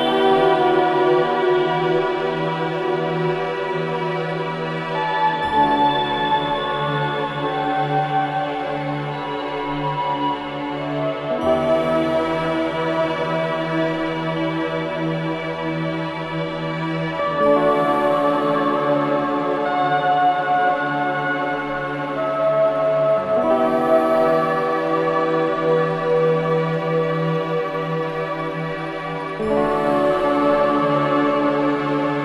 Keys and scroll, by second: 25.2 Return.